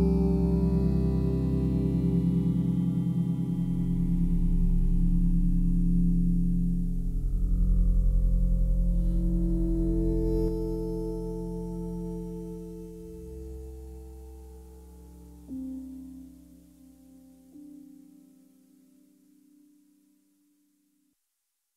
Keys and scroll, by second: 10.4 Delete.